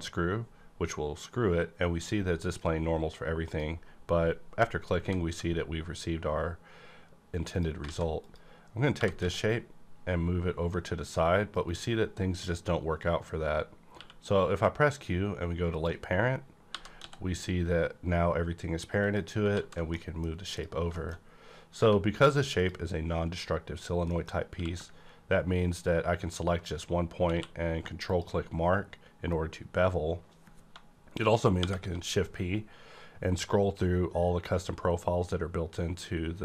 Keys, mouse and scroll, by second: 3.4 click, 3.5 click, 5.0 s, 7.5 click, 7.5 s, 7.8 z, 8.1 click, 8.6 scroll down 1, 8.9 g, 9.2 x, 11.5 right click, 13.3-13.8 scroll up 1, 13.8 q, 15.6 click, 16.4 scroll down 1, 16.7 g, 16.9 x, 19.0 click, 19.5 alt+z, 19.9 middle click, 20.4 click, 20.9 shift+middle click, 21.2-21.7 scroll up 1, 21.7 Right, 22.5 click, 24.0 middle click, 24.4 q, 27.3 q, 28.0 click, 28.1 click, 28.8-29.2 scroll up 1, 31.6 shift+p, 32.5-32.9 scroll up 1.